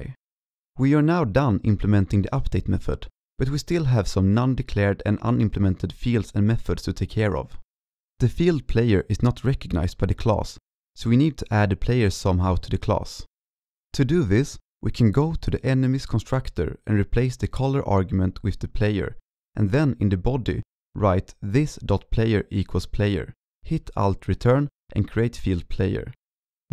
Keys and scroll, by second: 1.0 ctrl+s, 19.6 ctrl+s, 22.7 ctrl+s, 23.1 ctrl+Left, 23.5 ctrl+Left, 23.6 alt+Return.